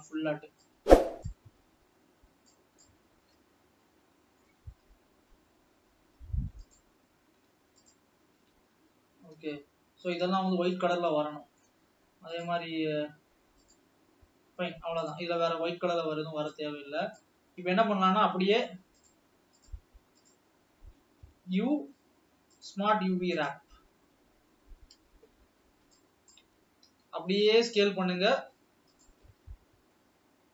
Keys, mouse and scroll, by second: 1.5 shift+click, 3.0 shift+click, 3.5-3.9 scroll down 2, 3.9-5.6 middle drag, 5.6 scroll up 1, 6.7 click, 8.0 alt+shift+click, 8.7-9.5 scroll down 5, 9.5 shift+middle click, 10.4 scroll up 2, 11.1-12.5 middle drag, 14.0-15.5 middle drag, 15.5-15.9 scroll down 2, 16.7 click, 23.6 u, 27.0 s, 29.8 g.